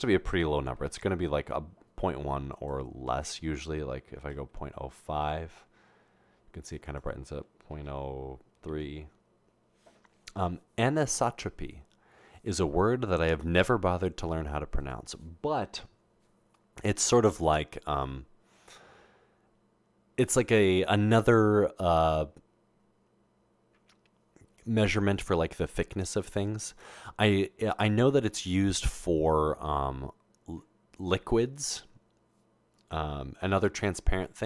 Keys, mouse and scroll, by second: 1.8 Return, 1.8 typing, 2.5 click, 2.9 typing, 3.1 click, 4.3-4.7 typing, 5.2 Return, 6.9 click, 7.7-9.6 typing.